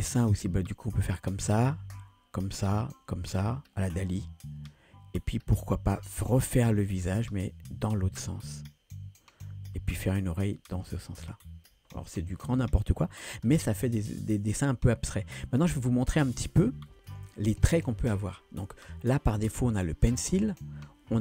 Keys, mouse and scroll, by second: 0.3-11.7 drag, 15.7 scroll up 2, 17.1 ctrl+z.